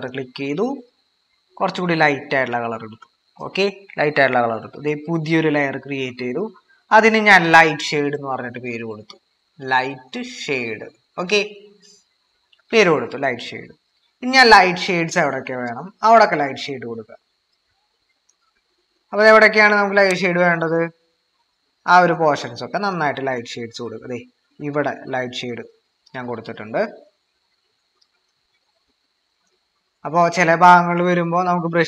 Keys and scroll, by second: 8.2-12.2 typing, 17.0 typing.